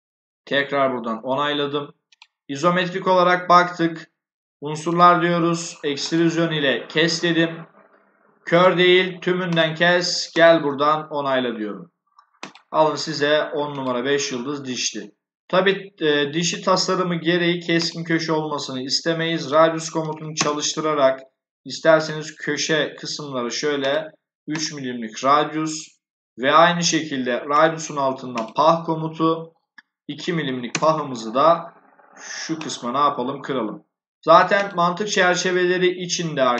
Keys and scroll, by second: 19.9 3, 20.2 Return, 30.3 2, 30.6 Return.